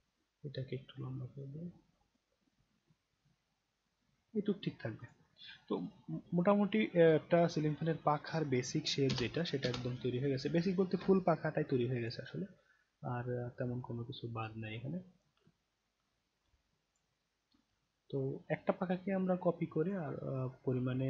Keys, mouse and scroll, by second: 0.0-2.1 drag, 2.3-2.7 scroll down 1, 3.1-3.5 scroll down 2, 3.5 scroll up 2, 5.0 click, 5.7-7.3 right drag, 7.7-8.2 scroll down 3, 9.0 space, 9.6 space, 10.1 scroll down 1, 11.1-12.0 alt+drag, 12.5-12.8 alt+scroll up 1, 13.0 alt+right click, 13.8-15.2 alt+drag, 15.4 scroll down 1, 16.5-16.9 alt+drag, 17.2 alt+right click, 17.8-19.9 alt+drag, 20.1 alt+right click, 20.7 alt+middle click.